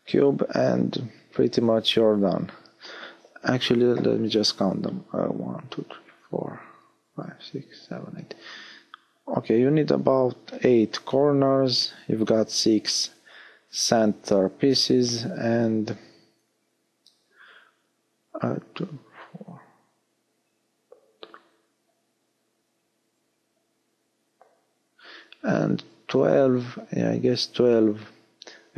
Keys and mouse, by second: 17.9 a, 18.9 Tab, 22.0 shift+a, 28.1 x.